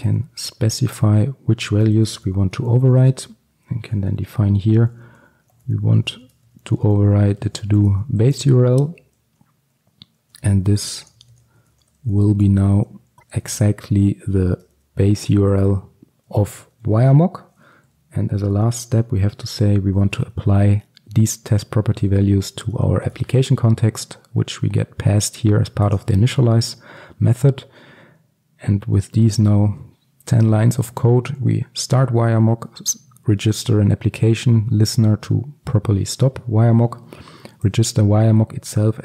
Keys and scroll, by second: 14.6 Return, 26.0 ctrl+alt+super+l.